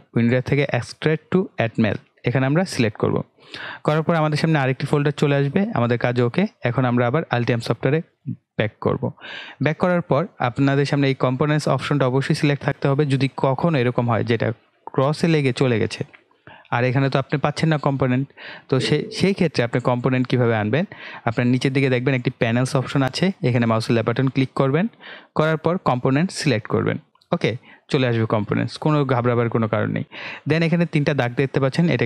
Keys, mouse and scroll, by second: 1.7 click, 8.2 click, 14.8 click, 27.0 click.